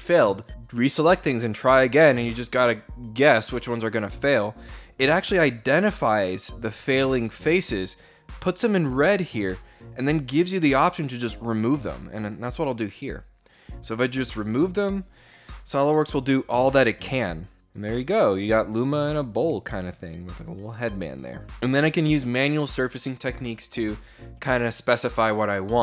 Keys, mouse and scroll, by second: 11.8 click, 19.1 middle click, 20.6 middle click.